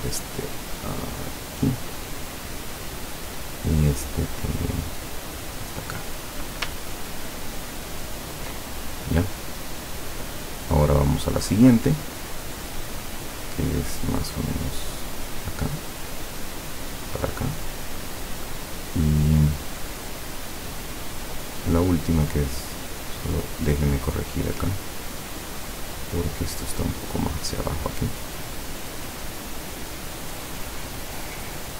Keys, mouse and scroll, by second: 2.3 click, 3.0 click, 4.4 click, 7.0-7.6 ctrl+scroll down 4, 8.1 ctrl+scroll down 2, 11.4 click, 15.4 click, 17.8 click, 23.5 click, 23.9 click, 24.5 click, 26.3-31.7 drag.